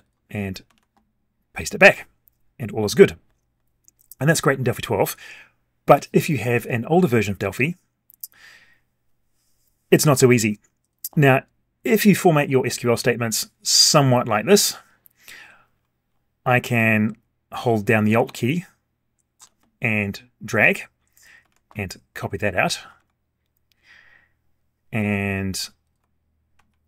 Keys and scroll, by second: 0.7 ctrl+v, 21.4 ctrl+c, 23.0 alt+Tab, 26.5 ctrl+a.